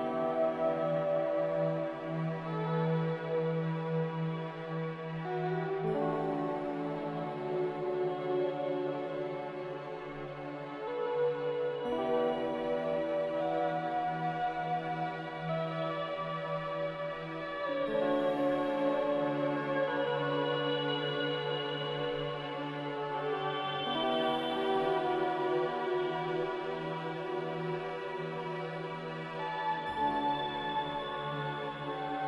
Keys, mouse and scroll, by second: 15.1 5.